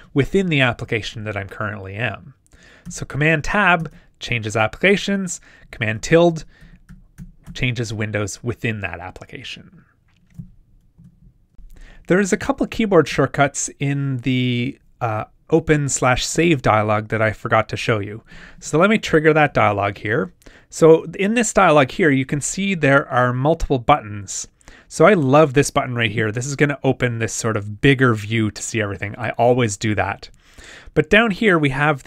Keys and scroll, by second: 2.8 super+Tab, 5.6 super+`, 19.5 super+w.